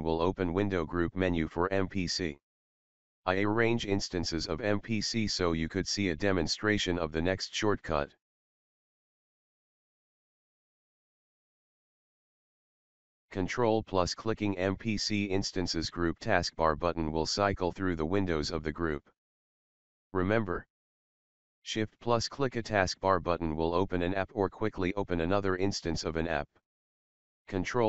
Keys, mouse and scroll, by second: 0.3 Escape, 1.0 right click, 3.5-8.4 drag, 13.7 click.